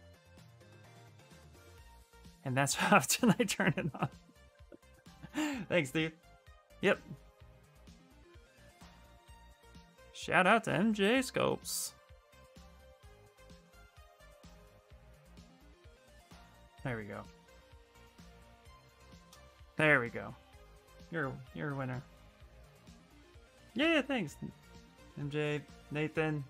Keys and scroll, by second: 17.1 q, 18.4 shift+f.